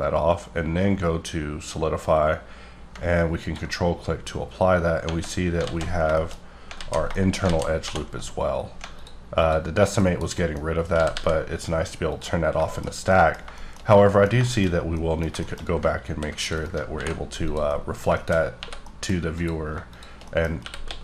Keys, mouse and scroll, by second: 2.9 ctrl+Num_Lock, 3.4 ctrl+click, 4.0-4.7 scroll up 4, 5.0 Tab, 5.6 alt+z, 6.1 shift+middle click, 6.3-6.6 shift+scroll up 4, 6.7 alt+z, 7.1 shift+middle click, 7.4 scroll up 1, 7.4 alt+z, 7.8 2, 8.1-8.9 scroll up 3, 8.9 alt+click, 9.4 alt+click, 9.9 KP_Decimal, 10.3 middle click, 10.6-10.9 scroll up 2, 10.9 g, 11.1 g, 12.1 click, 12.6 shift+middle click, 13.3 scroll down 2, 13.5 shift+middle click, 14.8 scroll down 1, 14.9 middle click, 15.7-16.0 scroll up 2, 16.0 ctrl+r, 16.6 right click, 16.9 ctrl+b, 17.4 click, 17.6 middle click, 18.3 shift+scroll up 2, 18.5 3, 18.8 middle click, 19.3 click, 20.2 middle click, 20.6-21.0 typing.